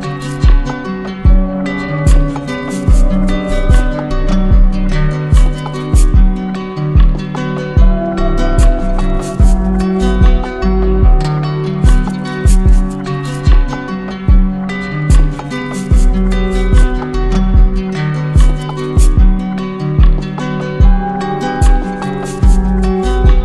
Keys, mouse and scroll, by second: 3.2-4.3 drag, 5.0-6.1 drag, 12.1 z, 13.4-14.5 drag, 16.8-17.9 drag, 20.3 click, 20.4 ctrl+z.